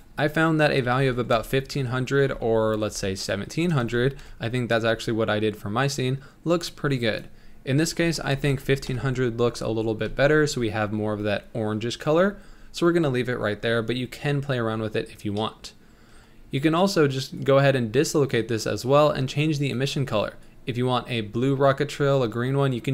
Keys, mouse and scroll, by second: 0.3-1.5 drag, 1.5 KP_0, 2.8 BackSpace, 3.9 KP_0, 7.2-8.7 drag, 8.7 KP_0, 10.1 ctrl+s, 15.1-16.0 scroll down 2, 16.0 middle click, 16.7-17.3 scroll up 5, 17.6 click, 19.8 click.